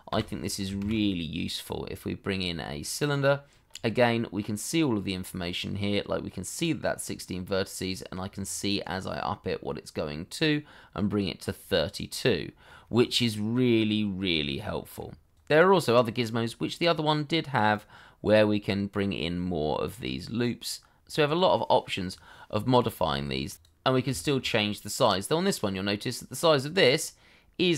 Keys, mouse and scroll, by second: 0.1 Delete, 0.8 shift+a, 3.6-4.0 scroll up 1, 4.0 middle click, 14.7 middle click, 24.1 shift+middle click.